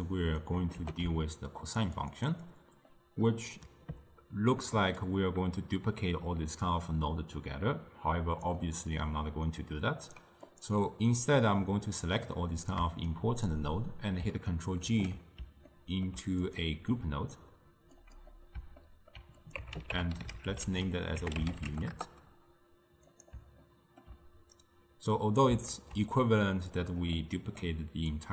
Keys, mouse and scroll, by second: 0.9 g, 2.5 click, 2.9-5.1 middle drag, 5.1-8.3 drag, 10.5 click, 12.0-13.2 drag, 14.9 ctrl+g, 15.8 ctrl+middle click, 16.5 click, 18.1-18.9 drag, 18.9-19.4 ctrl+middle drag, 19.4-22.6 drag, 23.2 click, 23.7-24.6 ctrl+middle drag, 24.6-25.8 drag, 25.8 ctrl+shift+d, 27.2-28.2 middle drag, 28.2-28.3 drag.